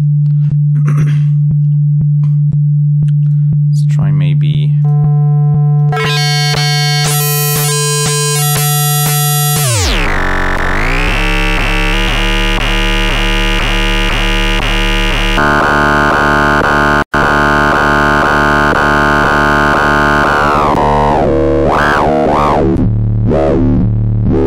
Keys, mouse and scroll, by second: 3.2 right click, 4.7 click, 5.7-8.7 drag, 9.4-10.9 drag, 13.2-14.3 drag, 15.3 click, 20.0-22.8 drag.